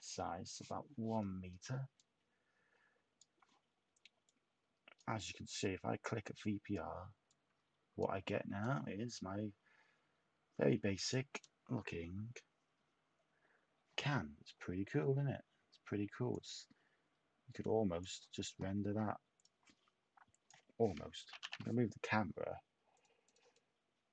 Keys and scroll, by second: 21.2 0, 21.3 Tab, 21.4 0, 21.5 Tab.